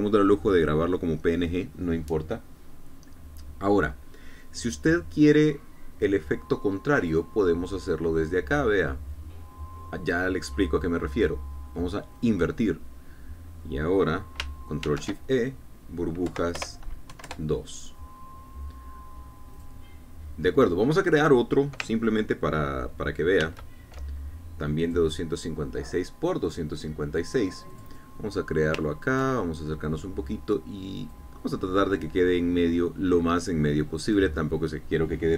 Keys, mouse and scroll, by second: 8.0 click, 13.2 click, 15.8 ctrl+shift+e, 17.3 Right, 17.6 BackSpace, 18.1 KP_2, 18.2 KP_Enter, 20.6 click, 24.4 ctrl+n, 25.8 click, 28.7 click, 29.9 ctrl+scroll up 2, 30.4 ctrl+click, 32.1 click.